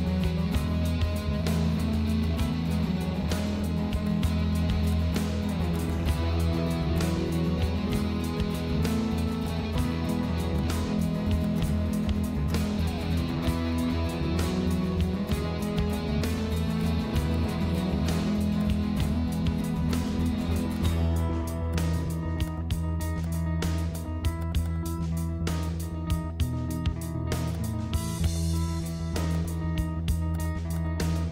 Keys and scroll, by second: 20.1 ctrl+z.